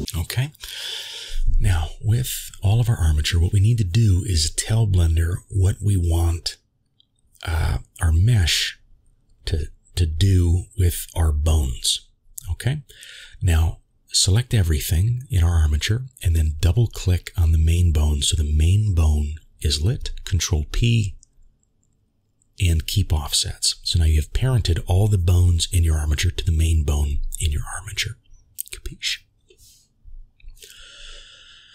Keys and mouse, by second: 0.0 a, 0.3 middle click, 2.4 shift+middle click, 3.1-4.9 middle drag, 6.9 middle click, 8.4-9.8 middle drag, 16.9 middle click, 18.7 ctrl+p, 24.4 middle click, 28.5 ctrl+s, 30.4 click, 31.3-31.7 middle drag.